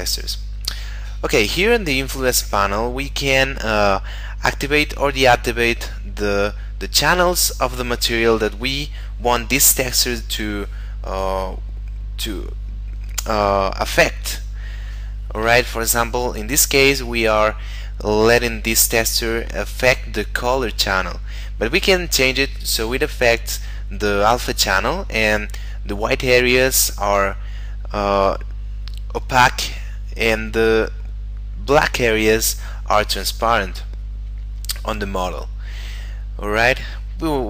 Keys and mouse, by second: 1.6 middle click.